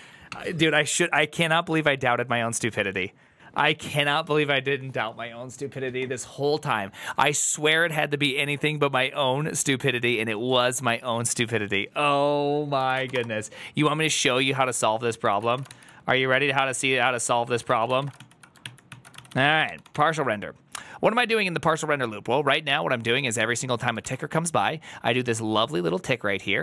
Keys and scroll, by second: 14.9-15.9 typing, 17.1-19.8 typing, 18.5 ctrl+n, 18.7 ctrl+t, 19.0 ctrl+c, 21.3-23.7 typing, 23.9 ctrl+c.